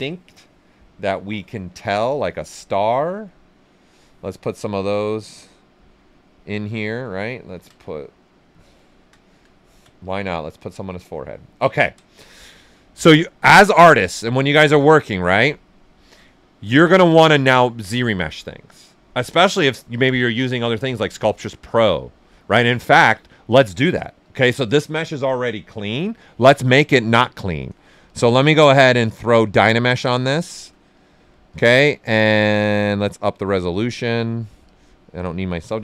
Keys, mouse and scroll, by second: 1.8-4.5 drag, 4.5 click, 5.7 right click, 7.5-8.2 typing, 8.1 click, 8.5 right click, 9.1 alt+shift+right click, 10.0 ctrl+click, 10.8 ctrl+click, 11.7 ctrl+right click, 12.9 click, 14.1-24.2 drag, 24.2-25.9 drag, 25.9 shift+f, 26.6 click, 28.0-30.3 drag, 30.9 click, 33.5 click.